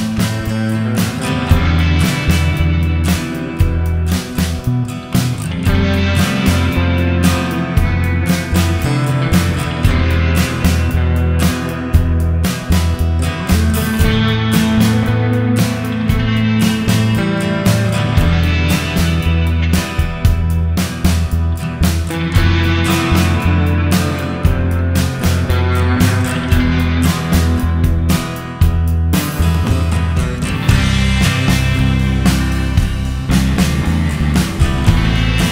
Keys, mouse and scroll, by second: 2.4 middle click, 7.4-8.2 scroll up 4, 9.2 middle click, 12.9 click, 13.6 click, 16.3 middle click, 25.2-26.5 scroll down 1, 26.5-27.8 scroll down 11, 27.8 middle click, 27.8-28.2 scroll down 1, 29.9-30.4 scroll up 3, 30.4-31.0 scroll up 2, 31.6-32.5 scroll up 2, 32.5-34.1 scroll up 1, 34.1-34.5 scroll up 2.